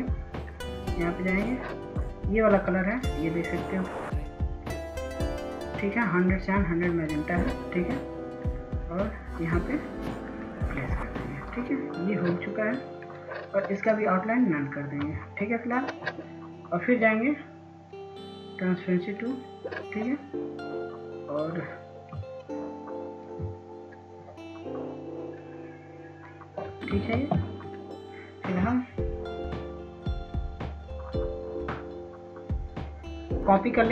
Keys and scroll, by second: 32.6 ctrl+space.